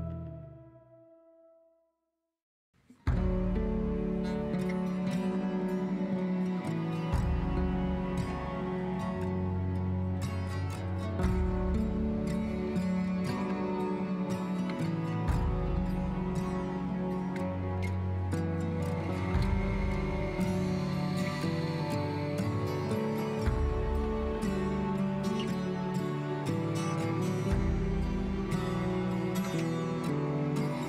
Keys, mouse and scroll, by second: 0.6 scroll up 3, 4.1 shift+middle click, 4.6-5.1 scroll up 8, 5.1 shift+middle click, 5.5-6.0 scroll up 3, 6.0-7.5 drag, 9.6-10.3 scroll down 6, 10.3-11.9 middle drag, 13.0-14.8 middle drag, 17.2-18.3 scroll up 4, 18.3-18.8 scroll up 1, 20.4-20.9 scroll down 8, 20.9-22.5 shift+middle drag, 22.8 shift+middle click, 23.7-25.3 shift+drag, 26.6 Tab, 27.3 a, 28.2 a, 29.2-29.7 scroll down 7, 30.4 s.